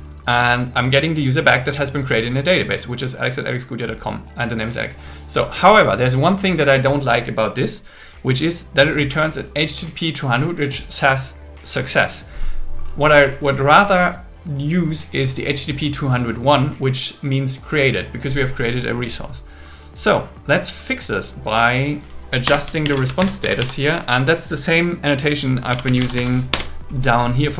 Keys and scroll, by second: 22.5 Return, 22.9 alt+l, 23.2 shift+r, 26.5 Return.